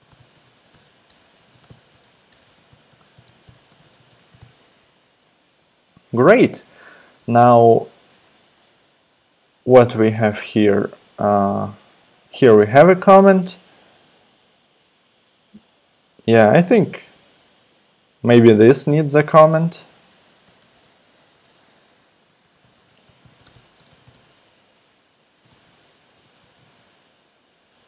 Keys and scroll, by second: 0.0-5.9 typing, 19.9 Return, 20.4 Tab, 20.6-27.7 typing.